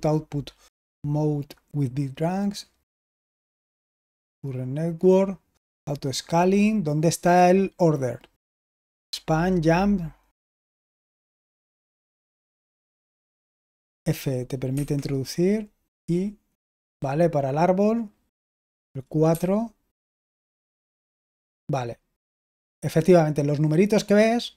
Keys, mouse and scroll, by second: 13.8 f, 14.6 Escape, 16.7 typing, 19.2-20.1 typing.